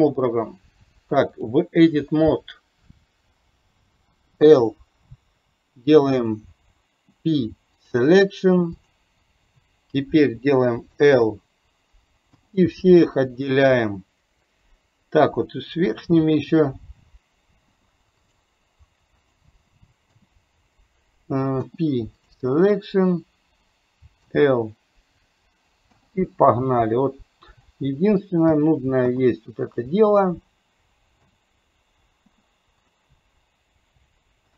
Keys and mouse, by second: 8.8 click, 22.9 click, 27.7 click.